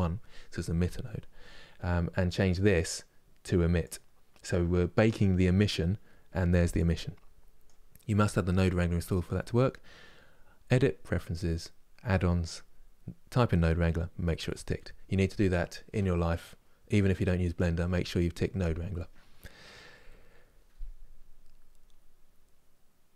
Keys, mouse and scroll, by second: 3.6-23.1 drag.